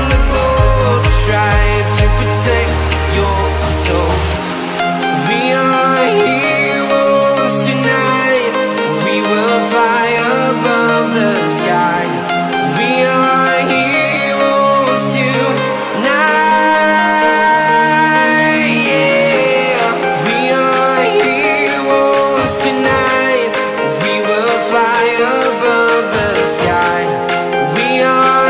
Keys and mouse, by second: 1.9 click, 3.1 click, 9.2-10.4 drag, 10.0 KP_0, 11.1 KP_0, 12.1-13.1 drag, 12.5 KP_0, 12.7 KP_0, 13.3 KP_0, 13.8 click, 14.0 middle click, 15.0 click, 16.2 click, 16.3 middle click, 16.4 click, 18.0 click, 18.7-20.1 drag, 21.1 middle click, 21.5 click, 22.9-24.9 drag, 25.0-26.4 drag, 26.4 middle click, 26.9 click, 27.9-28.4 drag.